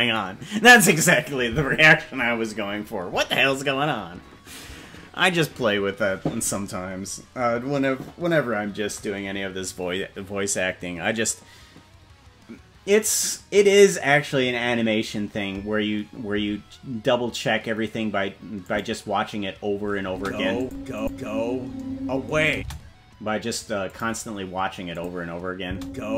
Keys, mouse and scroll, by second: 18.6 click, 20.0 space, 20.6 click, 21.0 click, 22.5 space, 23.8 click, 24.9 click, 25.6 space.